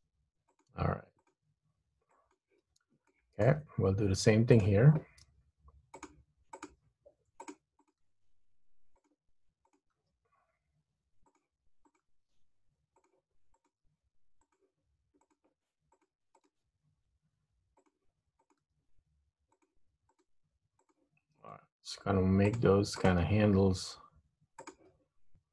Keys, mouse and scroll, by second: 0.0 g, 1.3 click, 1.4 g, 3.3 shift+middle click, 4.7 click, 5.4 g, 6.6 click, 6.8 g, 7.9 click, 8.2 g, 9.8 click, 10.0 g, 12.0 click, 12.2 g, 13.6 click, 13.9 g, 15.3 click, 15.6 g, 16.4 click, 16.6 g, 18.6 click, 18.7 g, 20.3 click, 20.4 g, 21.6 click, 21.7 g, 23.1 click, 23.4 g.